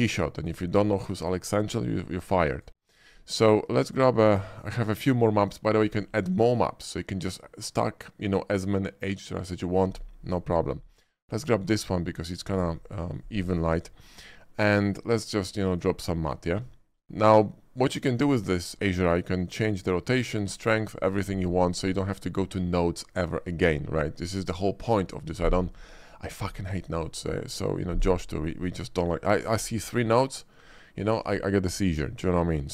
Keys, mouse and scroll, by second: 2.5 click, 11.2 click, 12.3 shift+middle click, 14.7 shift+click, 15.8 click, 16.9 shift+middle click.